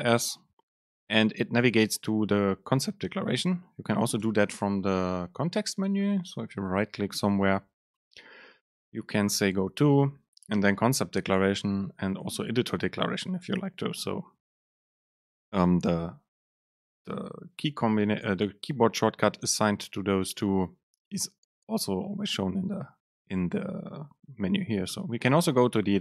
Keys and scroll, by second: 4.4 alt+super+[, 25.2 alt+shift+e.